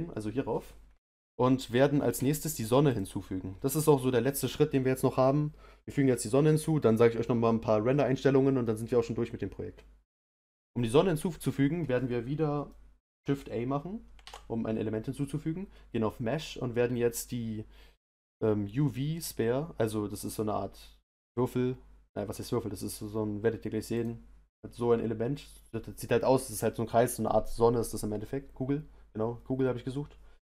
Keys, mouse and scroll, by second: 0.6 scroll down 2, 1.0-24.0 middle drag.